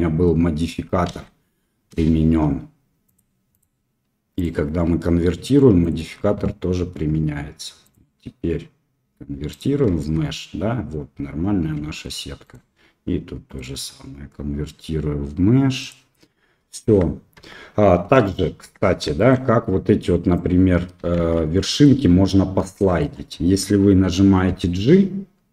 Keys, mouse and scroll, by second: 3.1 click, 3.5 click, 4.3 click, 7.8-9.5 drag, 9.9 Tab, 11.7 Tab, 13.5-15.8 drag, 16.8 Tab, 17.3 Tab, 18.2 click, 18.3 middle click, 18.6 Tab, 19.1 shift+click, 20.1 click, 21.1 shift+z, 22.7 shift+click, 24.4 g.